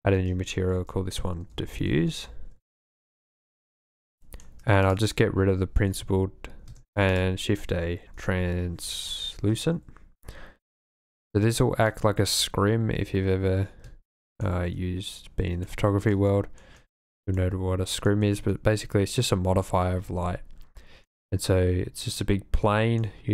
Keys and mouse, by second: 0.7-3.0 shift+middle drag, 1.5 shift+f, 4.2 shift+click, 6.0 x, 6.8 shift+a, 11.2 click, 12.1 click, 14.2 shift+click, 15.7-16.1 drag, 16.2-16.6 shift+drag, 17.5-18.2 shift+drag, 21.0-22.3 drag, 22.5-22.8 drag, 23.0 click.